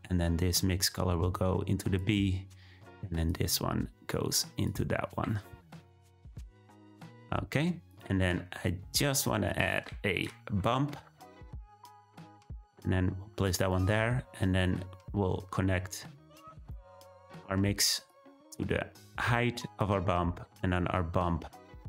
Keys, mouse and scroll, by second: 0.8-1.9 drag, 3.2-4.6 drag, 7.8-12.3 drag, 18.0-19.7 drag, 20.9-21.8 drag.